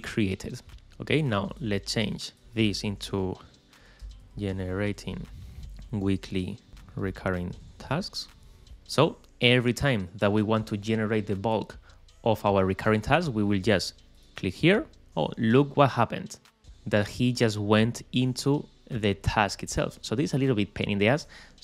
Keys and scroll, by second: 3.1-4.7 typing, 7.3 shift+space, 7.6 shift+a.